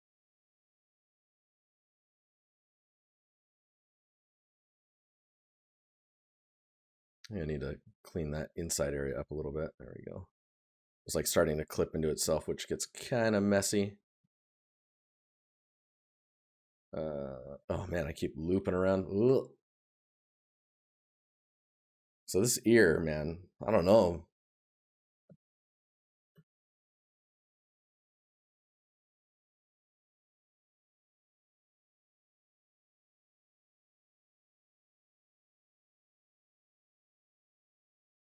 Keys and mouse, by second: 0.2 right click, 2.0 right click, 7.6 right click, 10.3 right click, 13.6 right click, 29.7 click, 29.9 click, 30.0 click, 31.2 shift+click, 31.4 click, 31.8 click.